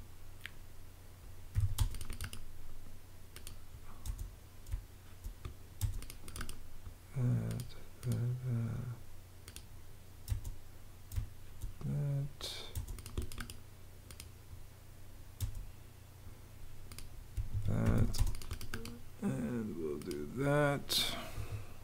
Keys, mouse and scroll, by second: 1.4 t, 1.7 space, 3.9 space, 10.2 space, 12.6 space, 15.3 space, 17.4 Escape, 17.5-18.4 typing, 21.2 Escape.